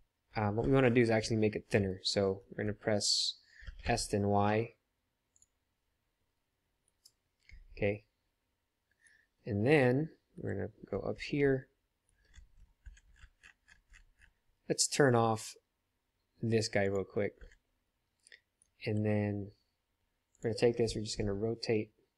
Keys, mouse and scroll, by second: 0.5 ctrl+z, 3.6 s, 8.6 middle click, 10.3 KP_7, 15.3-16.4 middle drag, 16.8 click, 18.7 KP_7, 20.3 click, 21.2 r.